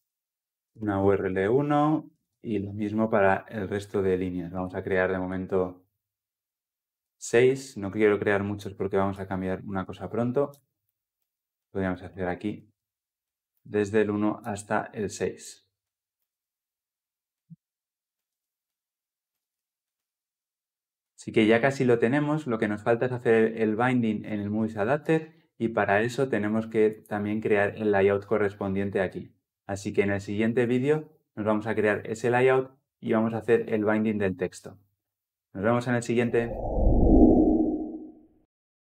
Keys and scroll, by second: 4.4 ctrl+d.